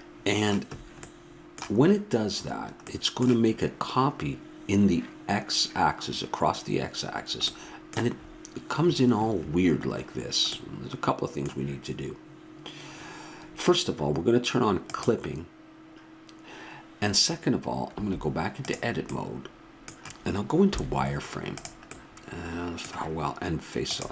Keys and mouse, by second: 0.3-14.8 middle drag, 14.8-16.7 drag, 17.9 Tab, 20.7 z, 23.8-24.1 drag.